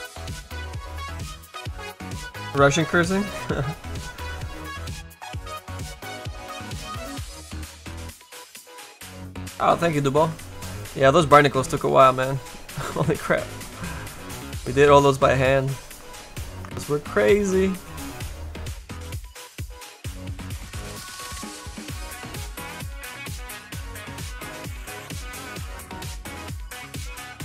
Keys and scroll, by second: 21.3 s, 23.7 s.